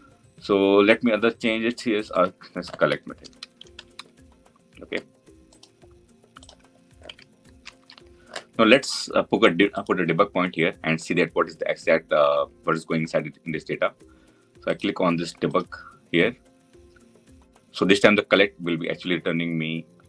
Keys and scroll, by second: 9.6 ctrl+F8.